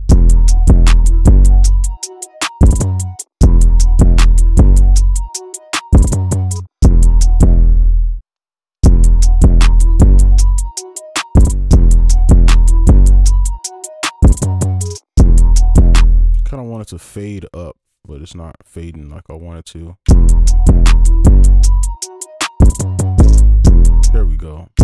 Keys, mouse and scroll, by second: 0.0 space, 1.5 ctrl+click, 3.1 ctrl+Up, 3.1 space, 3.3 space, 6.5 space, 6.7 space, 7.5 space, 8.7 space, 11.5 space, 11.6 space, 14.9 space, 15.1 space, 16.0 space, 19.7 right click, 20.0 space, 23.4 space, 23.6 space, 24.1 space, 24.7 space.